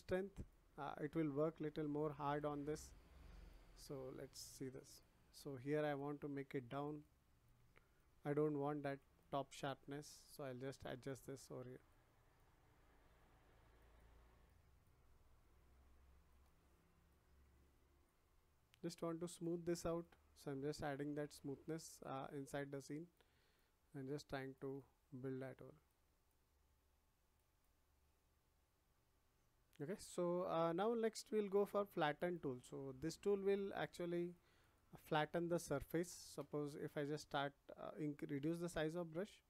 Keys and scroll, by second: 39.1 [.